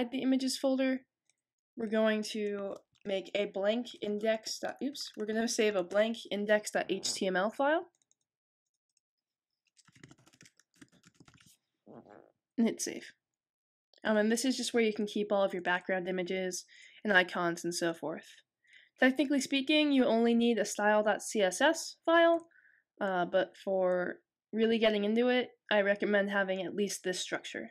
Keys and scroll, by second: 3.6-5.9 typing, 9.7-12.2 typing.